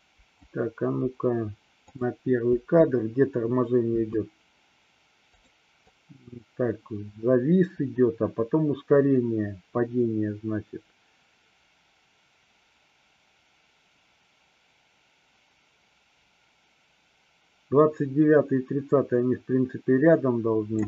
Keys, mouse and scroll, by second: 2.6 space, 4.0 space, 5.4 click, 6.0-20.8 drag.